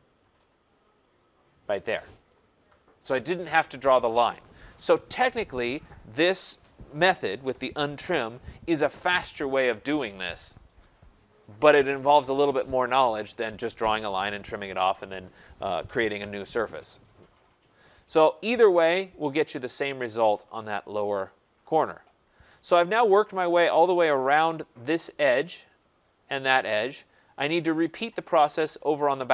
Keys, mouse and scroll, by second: 1.0 click, 1.9 typing, 4.9 click, 17.3-17.6 scroll, 21.0 right click, 21.4-22.3 scroll, 22.3 scroll, 23.1 right click, 23.4 scroll, 24.7 scroll, 28.2 right click.